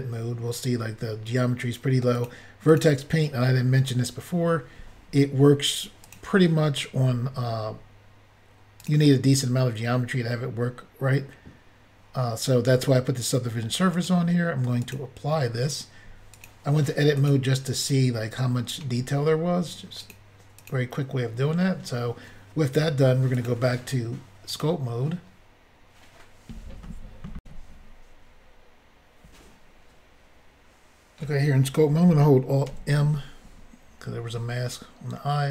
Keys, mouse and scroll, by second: 2.1 click, 2.2 click, 2.7 click, 2.8 click, 6.0 click, 6.1 click, 8.8 click, 8.9 click, 13.9 click, 14.0 click, 14.8 click, 14.9 click, 16.3 click, 17.2 click, 17.3 click, 20.0 click, 20.1 click, 20.6 click, 20.7 click, 23.4 click, 23.5 click, 24.5 click, 24.6 click, 27.4 Insert, 32.7 alt+m.